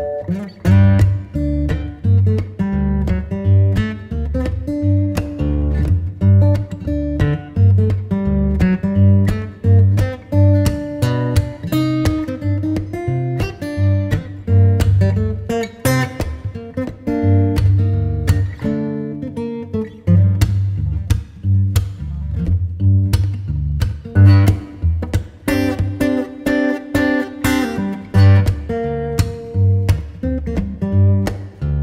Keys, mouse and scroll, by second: 8.1 right click, 8.6 click, 19.1 right click, 19.4 scroll down 1, 19.6-20.8 scroll up 1, 20.8 click, 21.7 right click, 22.4 scroll down 1, 22.6-22.9 scroll up 1, 22.9 Tab, 27.2 right click, 27.8 Tab, 28.0 right click, 28.6 click, 28.9 right click.